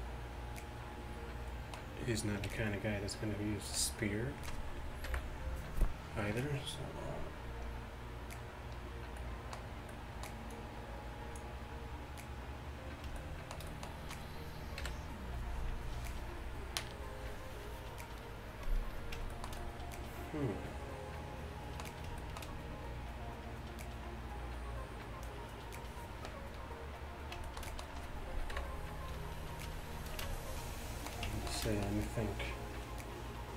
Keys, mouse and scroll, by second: 0.1-1.2 middle drag, 2.5 d, 3.7 d, 3.8 d, 5.1 KP_1, 12.9 middle click, 14.9 KP_1, 18.6-20.0 middle drag, 20.4 middle click, 22.3-25.9 middle drag, 27.3-28.6 middle drag, 28.6 KP_1, 30.4 middle click.